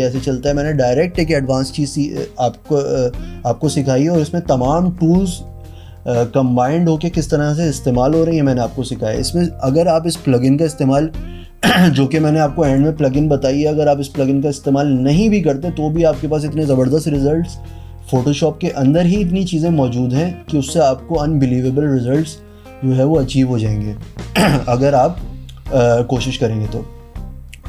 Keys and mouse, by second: 12.1 click.